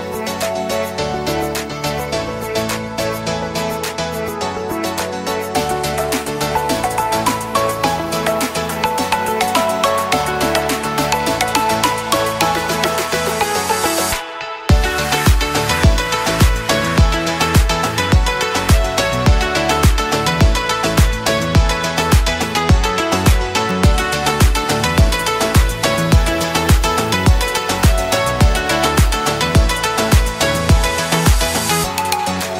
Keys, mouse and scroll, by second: 8.1 alt+scroll down 1, 8.8 alt+scroll up 1, 10.7 alt+scroll up 1, 11.2 click, 12.6 alt+scroll down 1, 13.7 space, 13.9 click, 14.2 space, 15.3 click, 18.2 shift+click, 20.2 right click, 21.5 click, 23.9 right click, 24.9 click, 26.9 shift+click, 27.6 alt+scroll down 1, 28.2-32.5 drag.